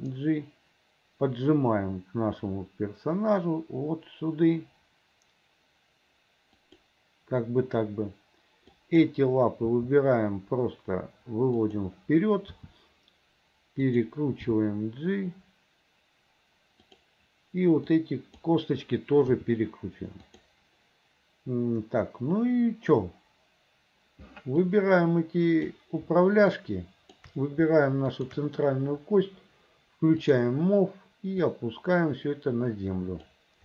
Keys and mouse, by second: 0.0 g, 9.0 click, 9.8 g, 12.7 r, 14.5 g, 18.0 click, 19.4 r, 24.8-25.9 drag, 26.8 shift+click, 28.2 shift+click, 30.3 click, 31.6-33.5 drag.